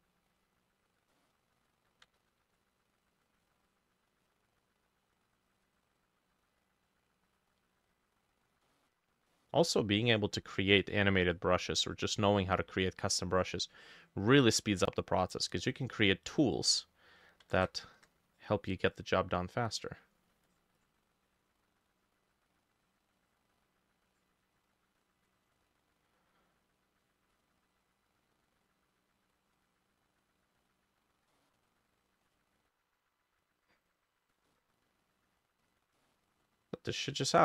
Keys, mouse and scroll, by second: 1.2 middle click, 2.2 ctrl+z, 2.6 ctrl+click, 3.1 double click, 3.5 double click, 3.7 double click, 4.2 double click, 4.6 double click, 4.9 double click, 5.4 double click, 6.5 double click, 7.1 double click, 7.6 double click, 8.0 double click, 8.7 middle click, 9.3 middle click, 11.3 double click, 13.4 double click, 13.8 double click, 14.1 double click, 14.8 middle click, 15.6 double click, 17.6 ctrl+x, 18.8 double click, 20.9 double click, 21.2 double click, 22.2 double click, 23.2 double click, 24.1 double click, 25.1 double click, 30.7 double click, 31.4 middle click, 32.4 double click, 34.5 middle click, 36.0 middle click, 37.3 middle click.